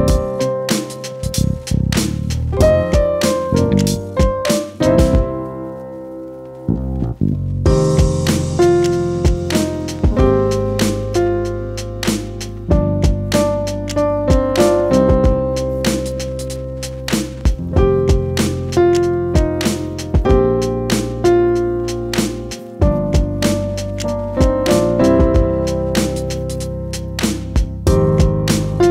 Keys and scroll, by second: 11.9 ctrl+e, 12.6-14.3 typing, 13.2 Return, 16.4 e.